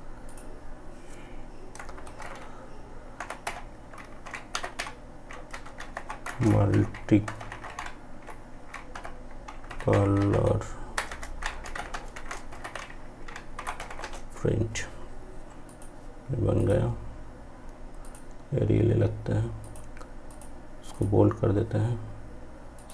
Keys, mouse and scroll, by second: 1.0 Caps_Lock, 2.2 typing, 3.3-4.0 typing, 10.4-11.5 typing, 14.7-22.9 drag.